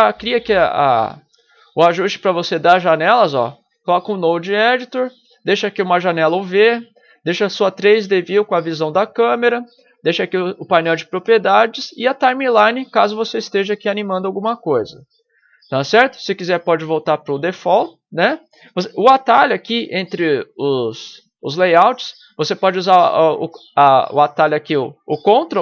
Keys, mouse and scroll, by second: 17.5 click, 21.2 click.